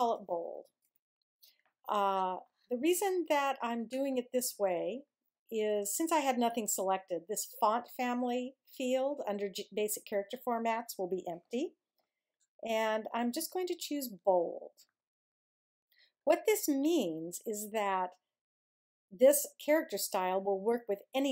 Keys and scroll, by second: 0.0 shift+b, 0.3 shift+o, 0.8 d.